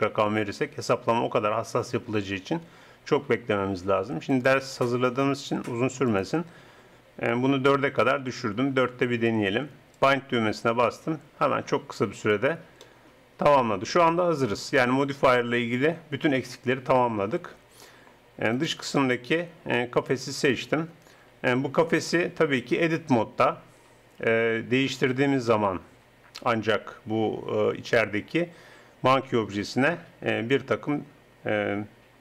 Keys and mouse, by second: 4.3-8.0 drag, 9.9-13.7 drag, 18.5-20.8 drag, 21.2 g, 22.8 Tab, 24.3 s, 28.1-29.6 middle drag.